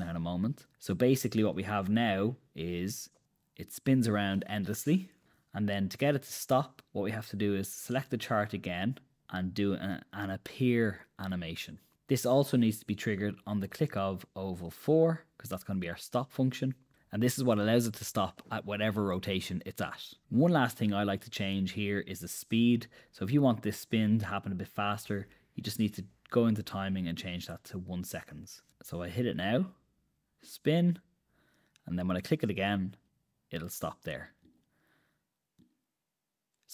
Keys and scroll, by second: 3.6 super+Return, 5.6 Escape, 29.0 super+Return.